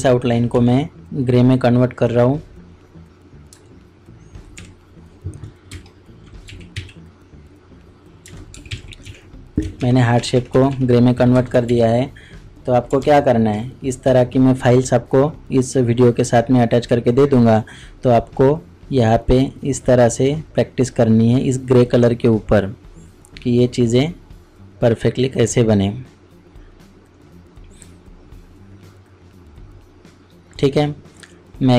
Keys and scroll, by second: 5.7 ctrl+alt+z, 5.7 ctrl+n, 5.7 ctrl+Delete, 5.8 ctrl+space, 6.3 ctrl+space, 6.4 d, 6.7 w, 8.5 alt+i, 8.7 alt+a, 9.0 alt+c, 9.8 alt+shift+Up, 11.3 Return, 11.7 ctrl+d, 12.8 typing, 13.0 ctrl+KP_Subtract.